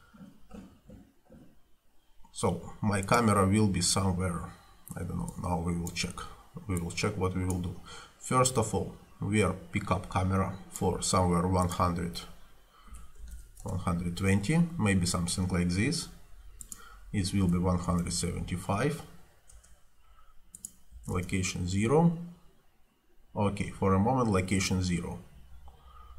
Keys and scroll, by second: 12.7-13.8 typing, 17.2-18.6 typing, 19.6 Return, 21.0 0, 21.2 Return.